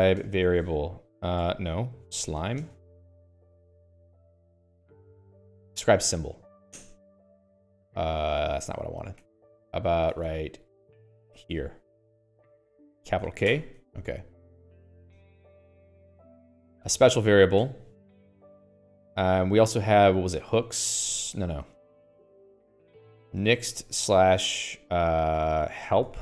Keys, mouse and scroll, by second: 0.0-5.9 typing, 3.9 End, 6.1 Down, 7.3 Return, 9.5 click, 9.7-12.2 typing, 10.5 click, 10.5 Escape, 13.3 Escape, 14.0 shift+k, 16.8 click, 18.1 q, 18.8 click, 19.1 Escape, 19.4-25.0 typing, 26.1-26.2 typing.